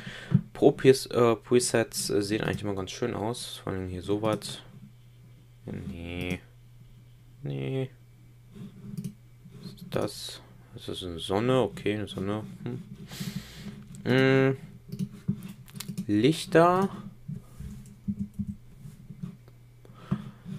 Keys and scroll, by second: 18.0 Up, 19.4 Down.